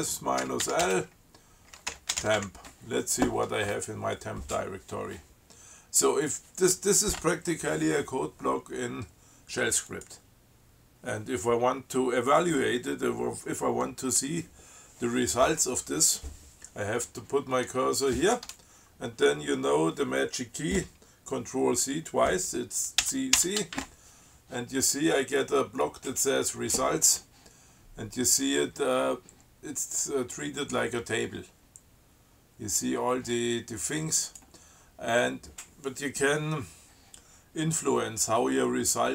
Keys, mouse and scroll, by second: 0.0-3.1 typing, 10.1 click, 23.3 ctrl+c, 34.5 click.